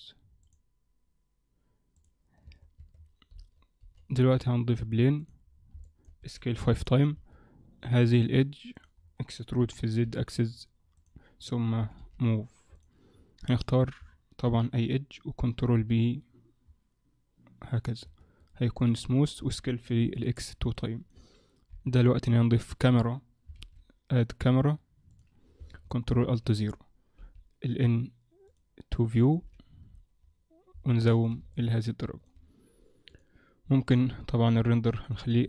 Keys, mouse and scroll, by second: 0.5 click, 0.5 scroll down 2, 1.9 click, 2.5 Tab, 2.8 Tab, 3.8-4.1 scroll down 4, 3.8 shift+c, 4.1 shift+a, 5.5-6.2 scroll down 2, 5.9 middle click, 6.2 s, 7.2 Tab, 8.1 click, 8.8 click, 9.3-9.6 scroll down 3, 9.6 e, 11.8 g, 13.1-14.0 scroll up 2, 13.5 click, 14.5 ctrl+b, 18.1 Tab, 18.4 right click, 19.4 s, 20.7 middle click, 21.7 KP_1, 23.6 shift+a, 26.1 ctrl+alt+KP_0, 27.2 n, 28.5 click, 29.4 click, 29.4 n, 29.8-30.7 scroll up 5, 30.9 shift+middle click, 30.9-31.5 scroll up 2, 31.5 ctrl+middle click, 33.1 click, 33.9 click.